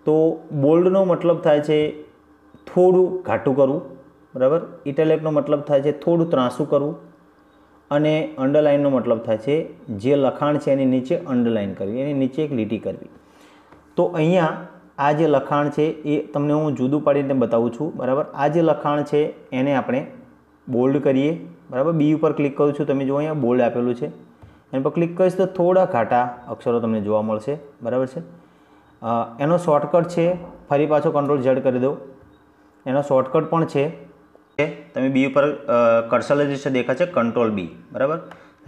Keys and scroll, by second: 32.4 ctrl+z.